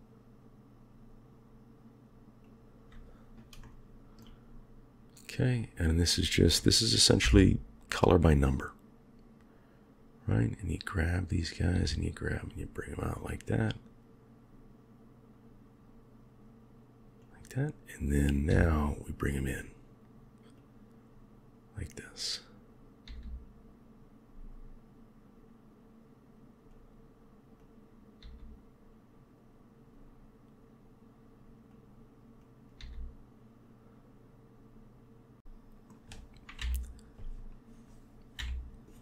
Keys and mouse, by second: 3.5-4.2 shift+middle drag, 5.4 click, 7.1 g, 10.9 click, 11.6 g, 18.1 click, 18.4 g, 22.0 click, 22.9 g, 27.4 click, 28.1 g, 32.3 click, 32.7 g, 35.4 middle click, 36.5 KP_1, 38.3 KP_1.